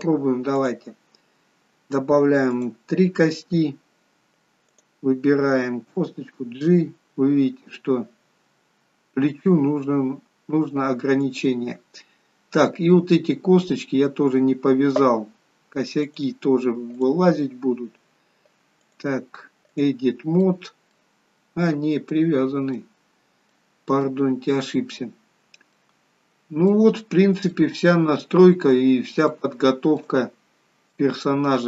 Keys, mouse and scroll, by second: 0.6 click, 2.6 click, 6.1 click, 6.1 g, 12.4 scroll up 2, 12.7 middle click, 14.4-15.0 scroll down 2, 16.2 click, 18.9 click, 20.5 middle click, 21.4-22.0 scroll up 3, 22.3 middle click, 23.0-23.5 scroll down 3, 23.6 middle click, 25.8 middle click, 27.0-27.5 scroll down 1, 27.6 shift+middle click, 28.4-29.0 scroll down 3, 29.4 shift+middle click, 30.3 scroll up 2, 31.0 middle click.